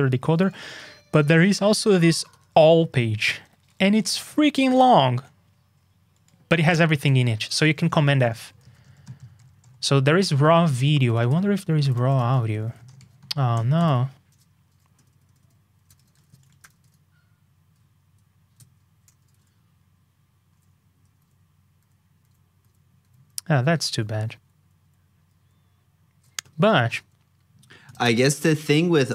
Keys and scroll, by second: 8.2 super+f, 19.0 super+g, 26.9 super+Tab.